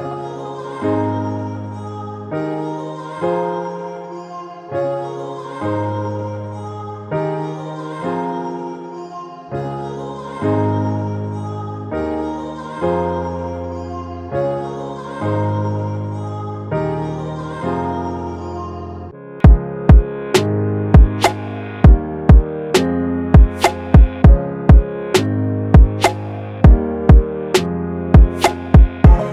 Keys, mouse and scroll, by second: 8.4 double click, 14.3 double click, 14.5-15.2 typing, 20.1 double click.